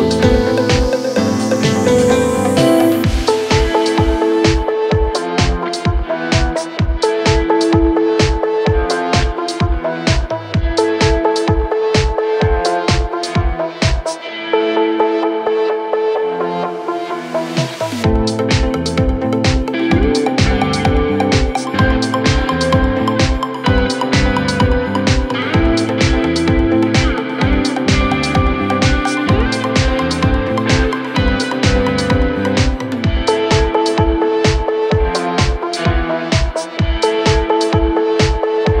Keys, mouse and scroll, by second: 1.0 click, 1.6 scroll up 1, 1.6 middle click, 2.1-2.6 scroll down 1, 2.6 ctrl+r, 3.3 click, 3.4 scroll up 1, 3.5-4.5 middle drag, 4.6 scroll down 1, 4.7 middle click, 5.2 a, 5.5 s, 6.5 click, 6.7 middle click, 7.5 shift+a, 8.3 Tab, 8.8-9.7 middle drag, 9.7 shift+a, 10.8-11.2 middle drag, 11.2-12.1 scroll up 1, 12.1 scroll down 1, 12.3 middle click, 12.7 Tab, 13.1 middle click, 13.6 s, 14.2 middle click, 14.7 KP_1, 14.8 KP_3, 15.3 KP_1, 15.9 scroll down 2, 16.2 click, 17.4 click, 18.0 click, 19.6 Tab, 20.7-23.7 drag, 23.7-24.5 middle drag, 24.5 click, 24.6-25.3 middle drag, 25.3 KP_1, 25.4 KP_3, 26.5-27.5 drag, 30.2 click, 30.9-31.9 middle drag, 31.9 KP_1, 32.1 KP_3, 32.5 r, 33.2 Tab, 33.9 click, 34.2 middle click, 35.1 KP_1, 35.4 KP_3, 36.1 ctrl+z, 36.3 ctrl+z, 38.2 right click, 38.5 click.